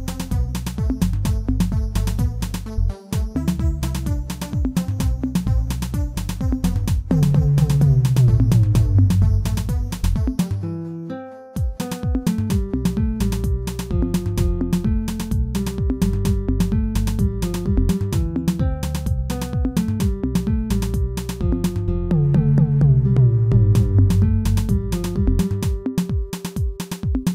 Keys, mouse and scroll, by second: 0.1 shift+click, 1.3 m, 3.3 click, 3.8 shift+click, 4.1 shift+middle click, 4.9 m, 5.7-8.0 middle drag, 8.0 click, 9.6 m, 10.3 shift+middle click, 10.9 click, 11.4 shift+click, 12.3 m, 13.2 a, 13.9 m, 17.5 click, 18.0 shift+click, 18.9 KP_7, 19.3-19.9 scroll down 1, 19.9 scroll down 1, 20.0 shift+z, 20.1 shift+middle click, 21.0-23.5 drag, 23.5 middle click, 24.2 shift+z, 24.6-26.2 middle drag, 26.2 click, 26.7 shift+click.